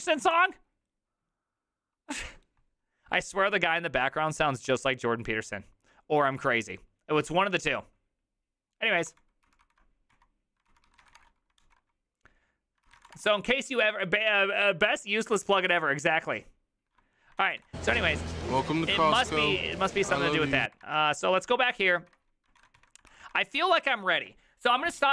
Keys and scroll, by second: 9.1 ctrl+c, 9.5 ctrl+c, 9.6 ctrl+c, 10.1-11.6 typing, 10.7 ctrl+c, 12.9 ctrl+c, 13.0 ctrl+:, 13.1 typing, 13.2 Return, 17.4 ctrl+a, 17.6 l, 18.3 ctrl+a, 18.4 1, 18.9 ctrl+c, 19.0 ctrl+:, 19.1 w, 19.1 Return, 20.1 alt+[, 22.0 alt+{, 22.6 ctrl+a, 23.1 ctrl+c, 23.2 ctrl+c.